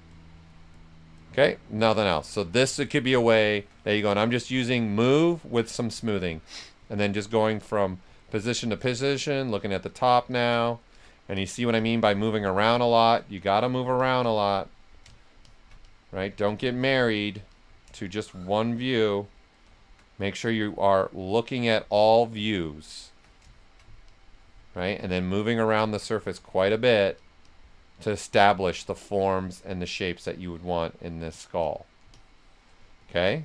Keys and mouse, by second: 2.7-5.0 shift+drag, 5.0 click, 5.5 shift+click, 6.0 right click, 7.0 click, 8.8 right click, 9.9 click, 10.9 s, 12.4 click, 12.6 shift+click, 13.4 click, 15.8 click, 17.9-19.5 shift+drag, 19.5 right click, 20.4 click, 21.0 alt+click, 21.9 click, 22.4-24.0 shift+drag, 24.8 ctrl+right click, 25.2 right click, 26.7 click, 27.9 right click, 29.1 right click, 30.0 click, 32.1-33.4 shift+drag.